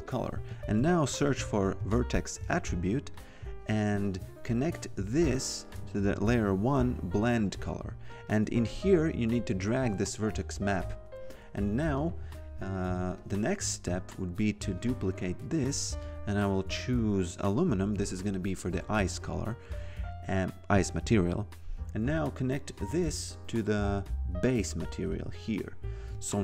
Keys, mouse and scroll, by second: 0.5-2.3 typing, 3.1 click, 7.4 click, 10.2 click, 11.9 click, 14.9 ctrl+click, 22.0 click, 25.1 click.